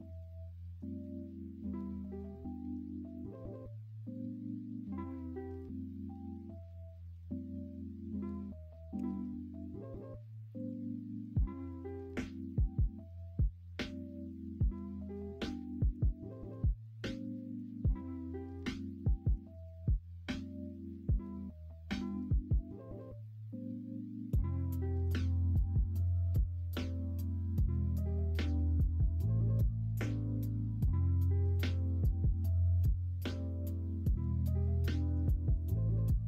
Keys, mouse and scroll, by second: 5.3-6.4 middle drag, 8.9 f, 9.7 middle click, 11.1 middle click, 11.2 Tab, 11.8-14.4 middle drag, 15.1 middle drag, 15.6 shift+middle click, 16.2 middle drag, 16.8 middle drag, 17.3 shift+middle drag, 17.7 middle drag, 18.1-18.8 middle drag, 27.4 middle drag, 28.1-29.1 middle drag, 29.5 shift+middle click, 32.0 middle drag, 33.1 middle click, 33.7-34.0 shift+middle drag, 34.8 middle drag, 35.3 shift+middle drag.